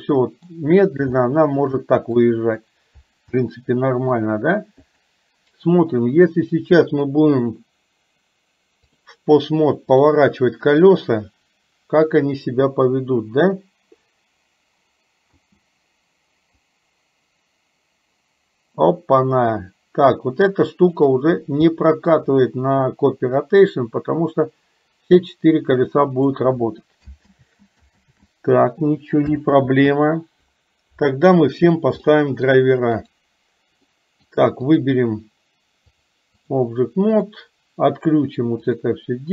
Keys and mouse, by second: 1.3 shift+middle click, 1.8 middle click, 3.4 middle click, 4.8 click, 6.9-9.0 drag, 10.2 click, 15.3 space, 16.8-21.2 drag, 21.7 middle click, 23.4-26.4 drag, 27.4 ctrl+z, 28.2 ctrl+z, 29.7 ctrl+z, 32.2 middle click, 33.2 click, 33.9 middle click, 34.8 click, 35.9 click.